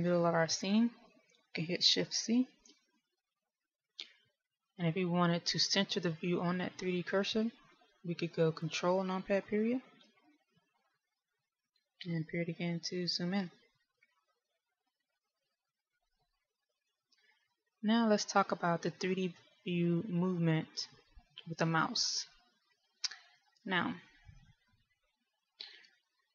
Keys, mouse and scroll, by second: 3.3 shift+c, 10.8 ctrl+KP_Decimal, 13.5 KP_Decimal.